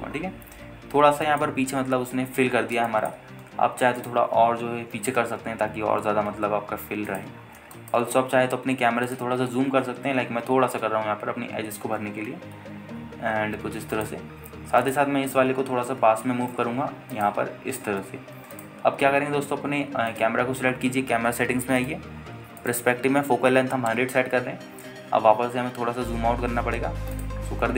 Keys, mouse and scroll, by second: 1.0 shift+click, 1.3 scroll down 2, 1.9 scroll up 1, 2.4 alt+shift+middle click, 3.7 scroll up 1, 4.1 alt+shift+middle drag, 5.2 shift+click, 6.0 g, 6.4 shift+z, 8.3 shift+drag, 8.5 scroll down 2, 8.9 alt+shift+middle drag, 10.3 click, 10.6 scroll up 1, 11.6 shift+f, 14.1-14.6 scroll down 4, 14.6 s, 15.1 click, 15.5-16.0 scroll up 1, 16.0 click, 16.6 g, 17.0 x, 18.3 shift+click, 18.9 g, 19.2 y, 19.7 click, 20.0-21.3 scroll down 1, 21.3 click, 23.0 click, 23.8-25.1 drag, 24.8 KP_0, 26.9 n.